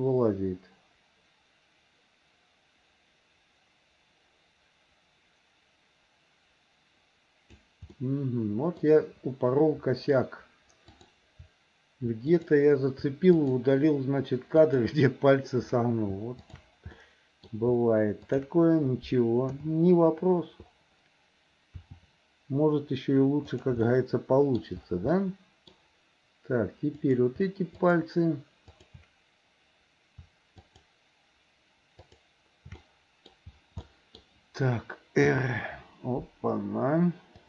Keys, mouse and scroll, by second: 8.0 middle click, 10.9 click, 12.4 click, 13.4 shift+click, 14.6 shift+click, 16.4 shift+click, 17.0 middle click, 18.2 shift+click, 19.6 KP_7, 21.9 r, 23.9 middle click, 25.1 middle click, 25.7-27.1 scroll down 1, 27.1 click, 27.9 shift+click, 28.8 shift+click, 32.1 shift+click, 32.8 middle click, 33.9 middle click, 35.4 r.